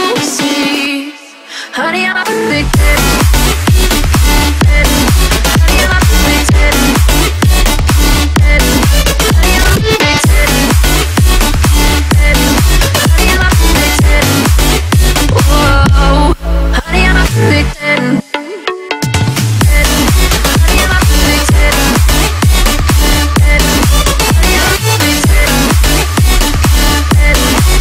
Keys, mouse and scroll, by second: 1.8 middle click, 2.5-3.0 scroll up 1, 3.0 click, 3.7-4.0 scroll down 1, 4.2-6.5 middle drag, 6.5 shift+click, 7.4 middle click, 8.5 ctrl+x, 8.8 scroll up 1, 9.8 p, 10.5 click, 11.3-12.9 typing, 13.8 click, 14.5 right click, 15.8 click, 19.3 scroll up 1, 20.5 right click, 21.2 click, 22.0-22.4 scroll down 1, 23.0-25.1 typing, 23.1 click, 25.5 click.